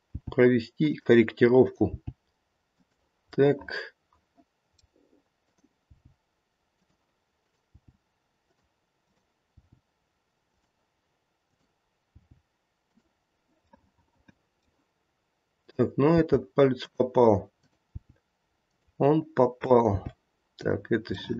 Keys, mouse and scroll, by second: 0.1 g, 1.6 click, 1.9 g, 3.4 middle click, 5.4 click, 5.9 g, 7.4 click, 7.7 g, 8.9 click, 9.5 g, 11.4 click, 12.2 g, 13.8 middle click, 14.4 middle click, 14.5 middle click, 15.5 click, 16.1 g, 17.5 click, 17.9 g, 19.6 click, 19.9 g, 21.2 middle click, 21.3 middle click.